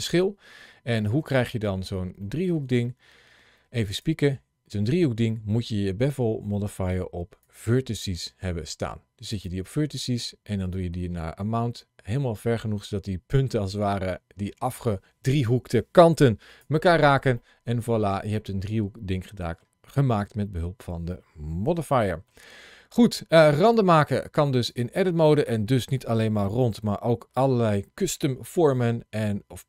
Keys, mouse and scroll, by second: 1.3-1.9 scroll down 1, 2.0 shift+middle click, 3.8 click, 7.3 click, 9.2 click, 17.2 middle click, 20.1-20.7 scroll down 2, 21.7 shift+middle click, 23.1 middle click, 24.5 click.